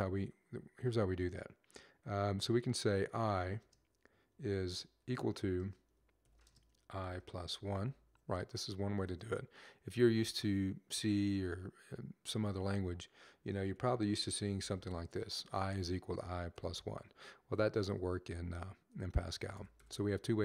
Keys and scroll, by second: 2.9 typing, 4.4 typing, 6.4-7.7 typing, 13.3-14.2 typing, 18.4 typing.